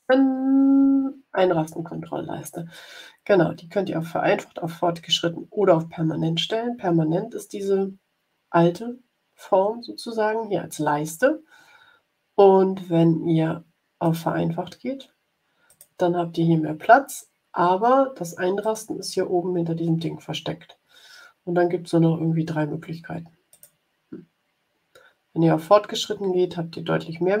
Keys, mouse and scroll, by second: 14.0 click, 15.6 click, 18.5-23.7 drag, 26.1-26.5 scroll down 1.